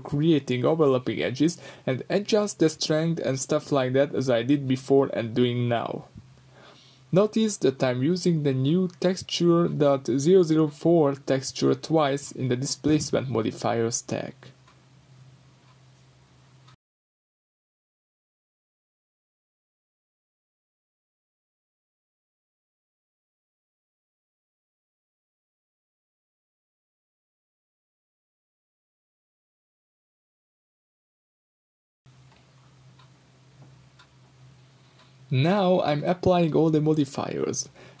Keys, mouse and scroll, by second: 0.1-3.5 middle drag, 3.5 click, 4.5-9.8 drag, 6.0 Return, 7.2 Return, 9.2 Return, 9.8-28.4 middle drag, 11.3-11.7 scroll up 2, 15.8-19.8 scroll down 2, 20.9 scroll down 2, 25.1-26.1 scroll up 2, 27.5 scroll down 2, 28.4 click, 29.0 scroll up 1, 32.1 click, 36.5 Tab, 36.8 middle click, 37.2-38.0 scroll up 2, 37.6 3.